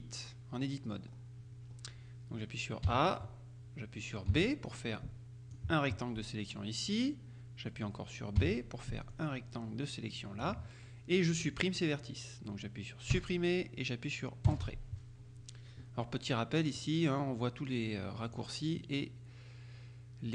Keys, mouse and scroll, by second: 1.2-1.6 scroll up 2, 1.6-2.1 scroll down 2, 2.9 a, 4.4 b, 4.7-6.1 drag, 8.4 b, 9.2-11.0 drag, 13.2 Delete, 14.6 Return, 16.8-18.9 drag.